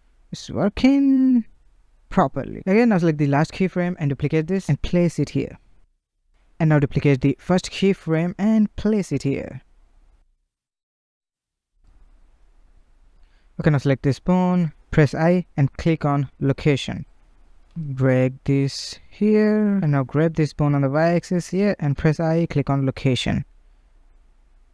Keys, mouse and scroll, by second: 1.3-2.9 drag, 3.7 shift+d, 5.2-6.5 drag, 7.2 shift+d, 8.9-13.5 drag, 18.3-19.9 drag, 19.9 g, 20.5 g, 22.8-24.7 drag.